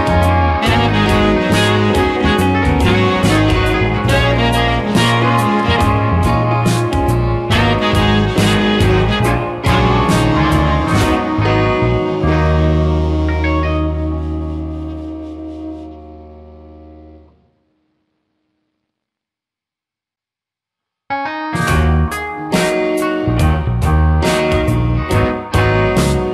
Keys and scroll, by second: 4.5 space, 10.2 space, 13.4 space, 18.1 space, 20.7 space, 22.3 Caps_Lock, 23.3 space.